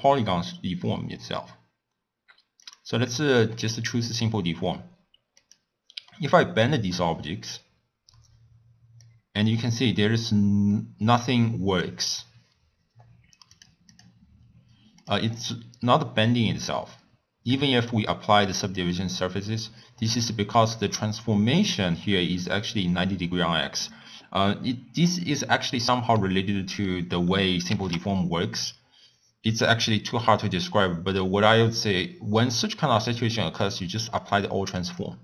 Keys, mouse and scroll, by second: 3.5-5.3 middle drag, 5.3 click, 6.0-9.1 middle drag, 9.1-13.6 drag, 13.9-15.0 drag, 16.1-34.2 drag, 35.0 click.